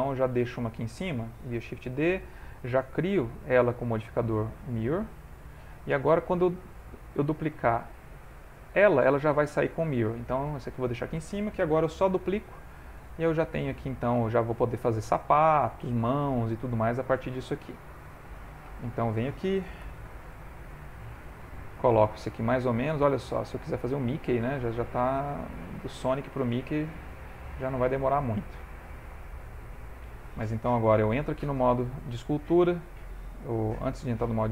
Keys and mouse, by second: 0.4 shift+f, 1.4 shift+d, 2.9 click, 7.6 click, 9.8 click, 10.0 g, 12.0 shift+d, 13.4 ctrl+middle click, 13.9 shift+middle click, 15.5 ctrl+middle click, 16.0 ctrl+middle click, 16.6 s, 17.7 g, 18.3 ctrl+middle click, 19.6 g, 20.9 middle click, 23.7 click, 24.4 ctrl+middle click, 25.1 s, 26.2 g, 27.4 g, 28.5 shift+middle click, 28.9 ctrl+middle click, 29.2 shift+middle click, 29.7 ctrl+middle click, 30.2 shift+middle click, 31.2 ctrl+Tab, 34.1 ctrl+Tab.